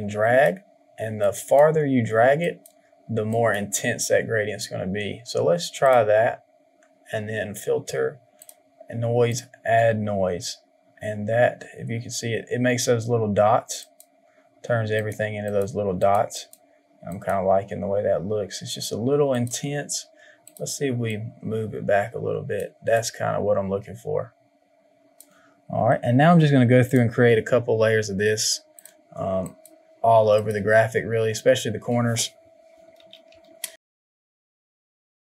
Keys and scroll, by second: 32.9 ctrl+z, 33.2 ctrl+z, 34.9 Delete.